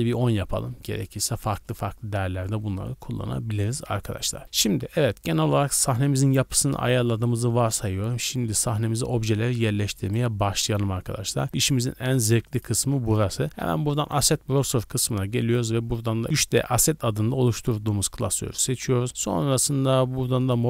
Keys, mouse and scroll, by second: 1.4-4.4 drag, 9.0 scroll up 2, 9.4 scroll down 1, 10.0 right click, 10.4-11.4 shift+middle drag, 11.4 click, 12.6-15.0 drag, 15.4-17.4 drag, 18.8 click, 19.1-20.4 scroll down 1, 20.4-20.6 drag.